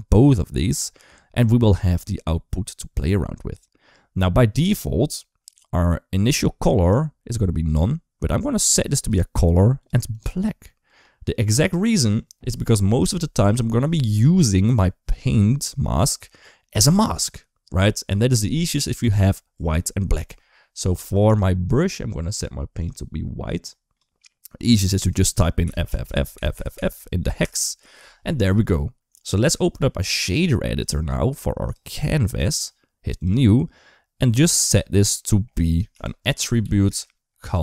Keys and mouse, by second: 7.6-8.9 drag, 21.0 click, 25.6 shift+f, 26.1 shift+f, 26.5 shift+f, 29.4 click, 30.7 click, 32.0 click, 34.2 click, 35.1 middle click, 35.7 shift+a, 36.4 t.